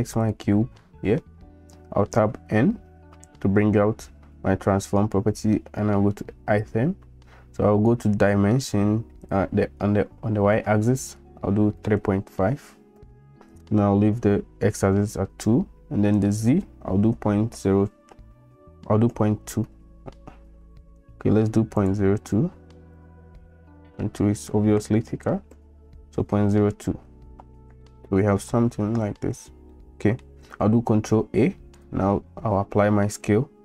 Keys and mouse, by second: 0.8-1.2 middle drag, 2.5 n, 10.0-13.7 drag, 16.2-20.7 drag, 21.9-26.3 drag, 23.9 Right, 27.8 shift+drag, 29.7-30.2 middle drag, 31.0 ctrl+a.